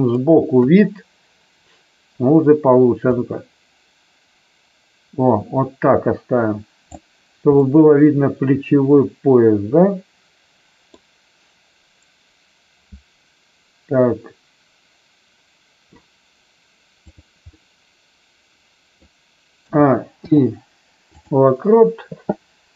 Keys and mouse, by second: 0.6 KP_3, 3.0-6.9 drag, 7.6-10.8 middle drag, 17.0 click, 17.4-19.0 middle drag, 19.6 a, 20.2 i.